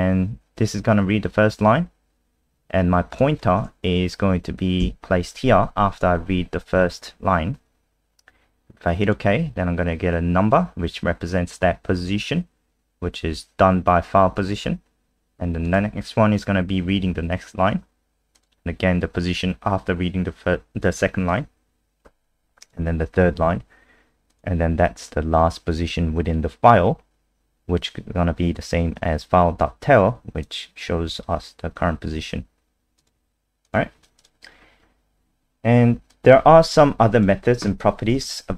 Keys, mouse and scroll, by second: 3.1 click, 4.8 Right, 9.0 click, 34.5 scroll down 4, 36.1 click, 38.2 ctrl+c.